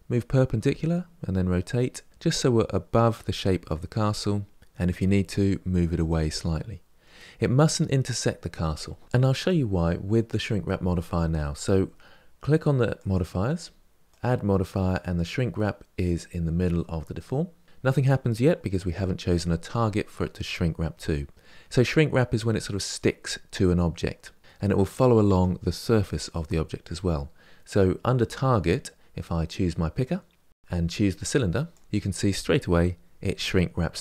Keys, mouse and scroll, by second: 0.3 r, 2.1-3.7 middle drag, 4.2 middle click, 4.8 g, 6.2-9.0 middle drag, 12.7 click, 13.8 click, 30.5 click.